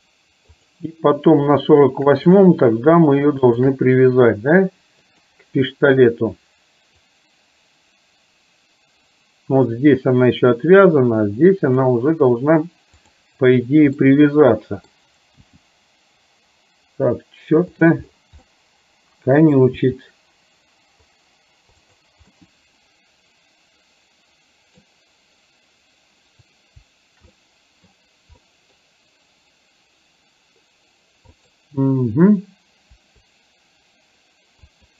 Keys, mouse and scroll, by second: 0.7 click, 2.3 click, 3.5 shift+click, 5.2 click, 7.2-11.9 drag, 13.0 click, 14.0-15.0 middle drag, 15.5 g, 18.5-19.7 scroll up 1, 19.8 g, 22.5-24.9 middle drag, 24.9-26.4 scroll down 1, 27.5-27.9 scroll up 1, 28.5 scroll up 1, 28.8-31.4 scroll down 1, 31.4 click, 34.7 click.